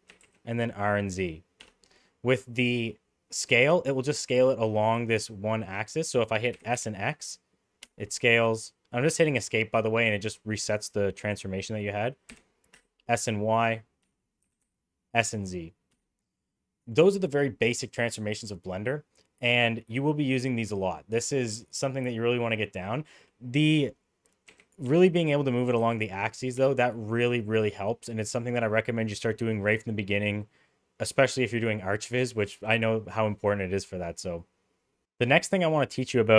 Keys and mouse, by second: 0.0 r, 6.4 s, 12.2 s, 14.3 s, 16.4 middle click, 23.5-24.2 middle drag, 24.4 g, 25.6 g.